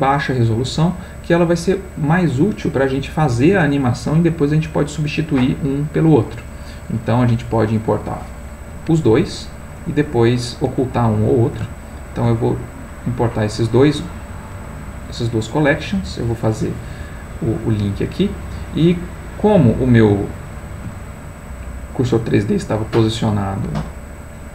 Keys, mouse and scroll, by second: 7.5 click, 11.8 shift+click, 15.5 click, 18.2-21.1 middle drag, 22.4-23.7 ctrl+middle drag.